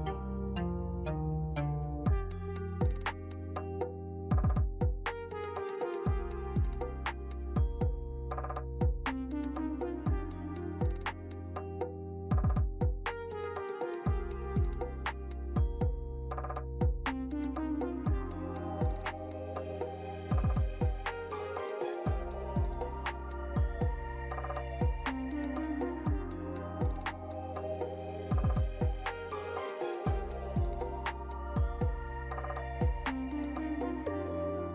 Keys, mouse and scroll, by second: 0.2 middle click, 2.5 click, 4.0 ctrl+shift+t, 9.5 scroll up 5, 10.0 alt+middle click, 11.5 click, 12.0 x, 12.3 shift+a, 15.7 middle click, 16.6 click, 18.3 click, 19.3 click, 21.7 scroll down 3, 22.1 middle click, 22.8 middle click, 23.4 scroll up 1, 23.6 middle click, 24.1 shift+a, 28.2 click, 29.1 click, 32.3 alt+middle click, 34.6 right click.